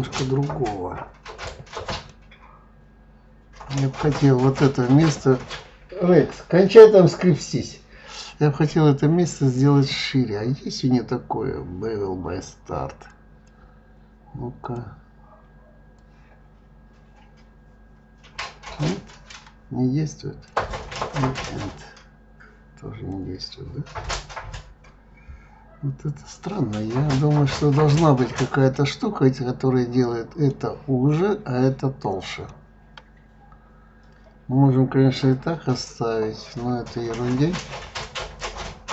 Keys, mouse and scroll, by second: 2.1-5.1 middle drag, 10.5-13.1 scroll down 2, 13.1-14.7 drag, 16.0-19.0 drag, 21.2-24.2 drag, 24.3-27.4 scroll down 2, 27.6 click, 28.2-31.2 middle drag, 32.5-35.5 middle drag, 38.2 click.